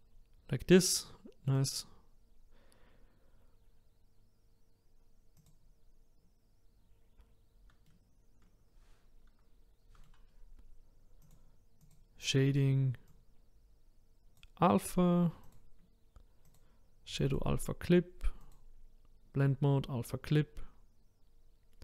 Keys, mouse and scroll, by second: 0.1-1.0 scroll up 1, 1.0-1.6 scroll down 2, 1.6 click, 5.5 click, 7.8-11.3 middle drag, 11.3-21.8 drag.